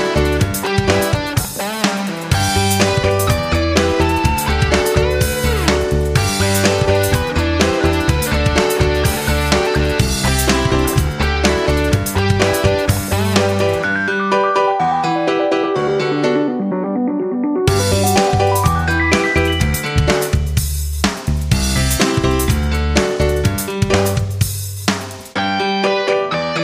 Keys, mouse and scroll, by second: 1.3 1, 1.8 click, 2.5 ctrl+c, 3.0 click, 3.3 ctrl+v, 4.0 Return, 5.2-12.4 drag, 13.0-13.3 ctrl+scroll up 1, 13.8-15.8 drag, 21.6 shift+click, 23.7 ctrl+click.